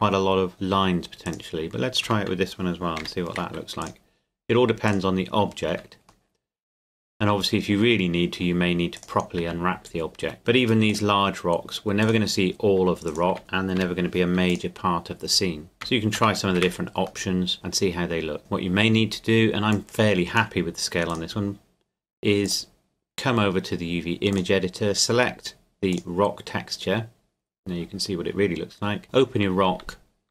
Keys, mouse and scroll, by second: 0.3-1.3 scroll up 1, 1.3 right click, 2.0 Tab, 3.0 u, 3.8 click, 5.4 scroll down 1, 5.7 Tab, 6.3 middle click, 8.9 right click, 9.4 Tab, 9.9 a, 10.2 a, 10.4 u, 10.9 click, 12.8 Tab, 13.1 right click, 13.3 Tab, 13.4 a, 13.8 u, 14.5 click, 15.7 Tab, 17.3 middle click, 18.4 right click, 19.7 click, 23.4 scroll down 1, 24.3 click, 26.7 scroll down 1, 28.7 Tab, 29.8 a.